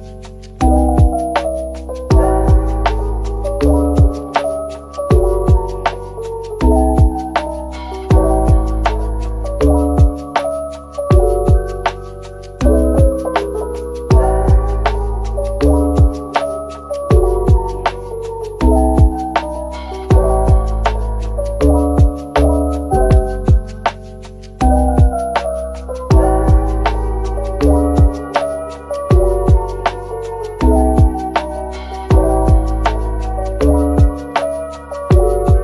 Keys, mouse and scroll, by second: 0.1-1.3 typing, 4.2 double click, 4.6 middle click, 5.3 shift+click, 6.1-6.4 typing, 8.5-8.8 scroll down 1, 8.8 middle click, 12.7-15.7 scroll down 1, 16.8 double click, 18.2 typing, 19.0-19.9 scroll down 1, 20.1 shift+click, 20.4 shift+double click, 20.6 shift+double click, 21.2 shift+click, 21.9 shift+click, 22.7 x, 23.6 middle click, 24.6 a, 26.7 typing, 28.0-28.4 scroll down 1, 28.6-29.9 typing, 30.6-31.0 scroll up 1, 31.3 typing, 32.3 right click, 32.6-33.0 scroll down 1, 33.0 middle click, 33.5-34.5 typing, 35.2 middle click.